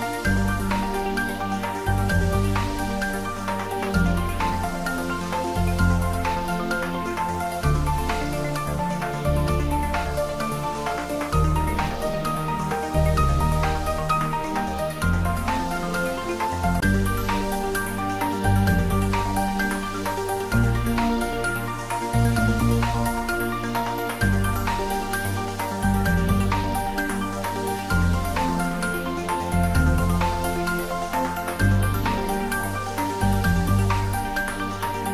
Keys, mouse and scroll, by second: 0.3-1.0 scroll up 1, 2.2 Tab, 3.4-3.7 scroll down 1, 8.7-10.0 scroll up 1, 12.1-13.5 middle drag, 13.5-15.4 scroll up 1, 17.1 Tab, 18.3 click, 19.6 middle click, 19.7 scroll up 1, 20.3 middle click, 21.5-23.4 scroll up 2, 24.1 scroll up 1, 24.3 alt+shift+click.